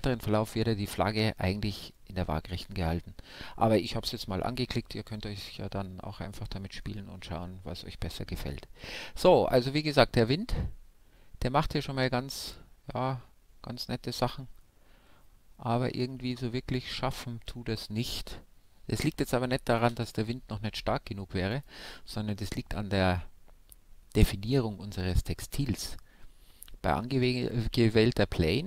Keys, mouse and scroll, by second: 9.2 alt+a, 11.6-13.2 middle drag, 18.6 alt+a, 19.4 shift+Left, 21.0-22.8 right drag.